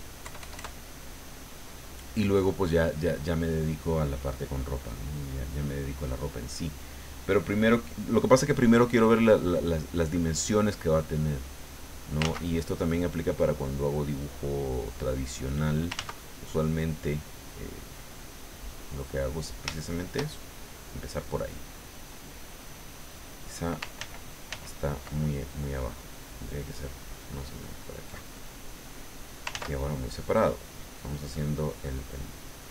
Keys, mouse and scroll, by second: 0.2 KP_Add, 4.9-6.4 drag, 6.8 click, 7.5 click, 10.6-12.1 drag, 12.2 ctrl+z, 13.0-15.7 drag, 15.9 ctrl+z, 16.5-19.3 drag, 19.8-20.8 shift+middle drag, 24.0 ctrl+z, 26.0 click, 26.8-28.3 drag, 29.5 ctrl+z, 30.7-32.7 drag.